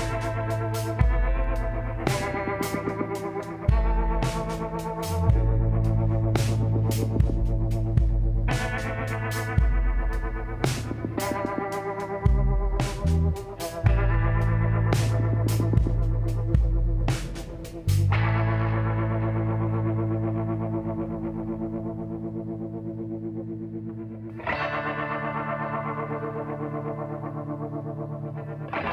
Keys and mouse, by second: 1.5 click, 3.8 r, 4.8-6.3 middle drag, 6.7 g, 12.1-13.3 middle drag, 15.9-17.7 drag, 22.6-28.5 middle drag, 25.4 r.